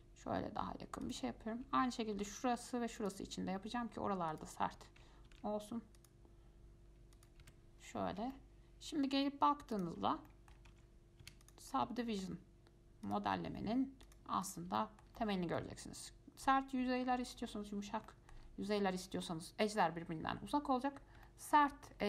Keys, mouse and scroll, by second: 2.3 ctrl+r, 5.5 ctrl+r, 7.6 Tab, 8.0-8.5 scroll down 4, 8.5-9.9 shift+middle drag, 9.9 click, 10.2 shift+scroll up 3, 10.5 shift+middle drag, 10.7 shift+scroll down 1, 10.9 Tab, 11.5 Tab, 11.6 click, 11.9 scroll up 1, 12.2-13.3 shift+middle drag, 13.3-14.7 drag, 15.0-17.6 shift+middle drag, 17.6-17.9 scroll down 5, 18.3-21.2 shift+middle drag, 21.2 scroll up 1, 21.5-22.0 shift+middle drag.